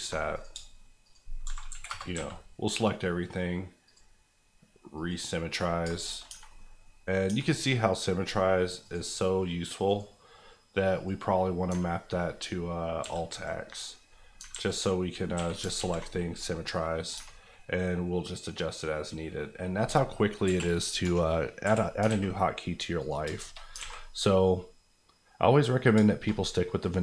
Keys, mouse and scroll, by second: 0.2 KP_Enter, 0.3 click, 0.5 shift+click, 1.4 shift+e, 1.7 KP_1, 1.8 KP_Enter, 2.1 a, 3.8 click, 5.5-6.2 scroll down 3, 5.9 shift+middle click, 6.3 Tab, 6.4 middle click, 7.2-7.5 scroll up 2, 7.3 Tab, 8.8 click, 9.8 right click, 10.9 click, 11.6 alt+click, 13.0 x, 13.9 scroll down 1, 14.5 alt+x, 14.9 scroll up 1, 15.3 a, 15.7 alt+x, 16.1 scroll down 1, 16.4 middle click, 16.9 scroll up 1, 17.1 Tab, 17.5 middle click, 19.6-20.4 scroll down 1, 20.4 KP_1, 21.6 KP_1, 22.0 alt+a, 22.5-23.0 scroll down 1, 23.0 click, 23.2 shift+click, 23.3 shift+middle click, 23.5 middle click, 23.7 alt+middle click, 23.8 alt+a, 24.0 middle click, 25.8 scroll down 2, 26.0 shift+middle click, 26.2 middle click, 26.7 middle click.